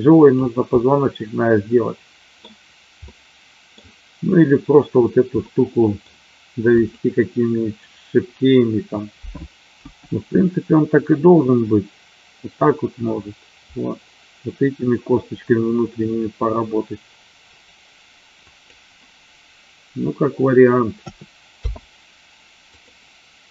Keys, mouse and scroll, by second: 0.8-2.4 middle drag, 3.0-3.7 middle drag, 5.5-6.0 middle drag, 6.6 click, 9.7 g, 18.4 click, 21.0 a, 21.5 i.